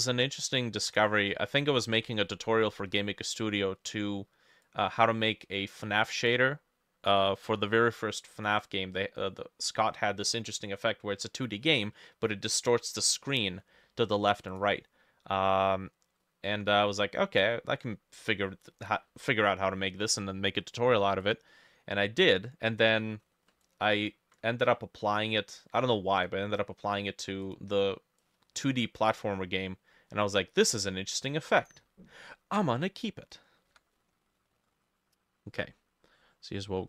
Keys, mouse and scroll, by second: 0.4 ctrl+middle click, 1.2 middle click, 2.1 middle click, 2.2 ctrl+middle click, 2.7 middle click, 7.2 ctrl+middle click, 23.7 ctrl+click, 27.8-29.2 drag, 27.8 f, 33.7-36.8 drag, 33.7 b, 34.3 shift+middle click.